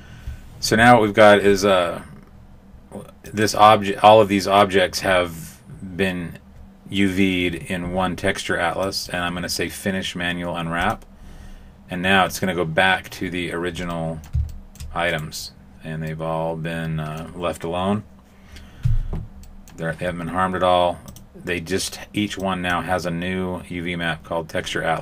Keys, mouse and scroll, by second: 3.2 click, 8.8 click, 10.8 click, 13.9 middle click, 14.4 shift+middle click, 15.0 right click, 16.0 middle click, 19.4 middle click, 21.0 click, 22.4 click.